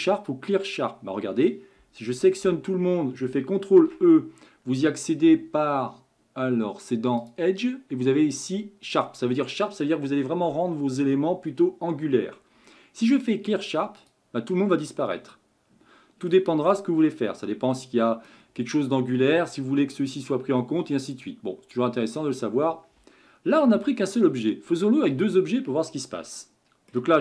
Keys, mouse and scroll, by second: 2.1 a, 2.4 a, 3.7 ctrl+e, 7.2-10.4 drag, 14.5-16.6 middle drag, 16.6-17.0 scroll down 4, 17.0-20.2 middle drag, 23.7 Tab, 24.5-27.0 shift+middle drag.